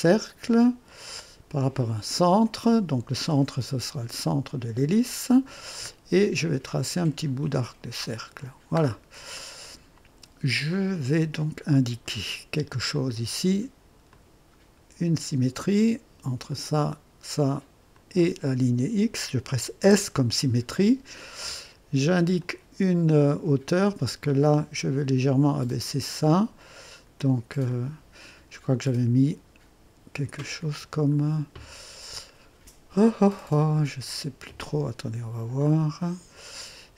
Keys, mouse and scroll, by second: 0.9 click, 2.5 click, 4.2 click, 6.9 click, 8.2 click, 8.9-9.3 scroll up 2, 9.4 right click, 10.7 right click, 12.0 right click, 13.0 click, 14.1 click, 16.5 click, 17.9 click, 19.8 s, 22.4 click, 24.2-26.4 drag, 27.7 click, 36.0 click.